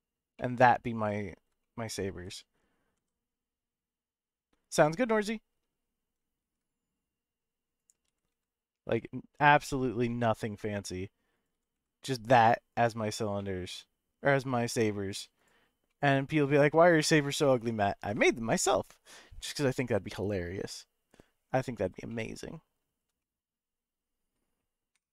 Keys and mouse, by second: 0.3-1.2 middle drag, 1.6-2.2 shift+middle drag, 2.9 s, 6.4 shift+z, 7.8 click, 8.0 g, 8.3 z, 9.7 s, 10.1 z, 11.3 click, 11.5 g, 11.7 z, 12.7 click, 13.4-14.9 middle drag, 15.9-17.2 middle drag, 22.1-22.8 shift+middle drag, 23.2-24.3 middle drag, 25.0 F12.